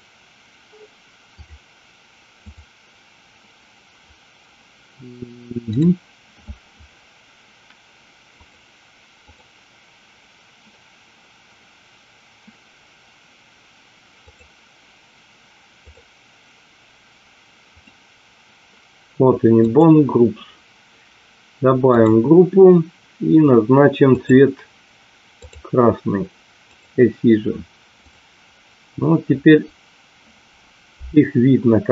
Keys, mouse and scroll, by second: 1.2 click, 2.3 click, 8.5 click, 9.2 click, 14.2 click, 15.8 click, 17.7 click, 19.6 click, 24.2-25.7 drag, 26.6 click, 28.1 click, 31.1-31.9 middle drag.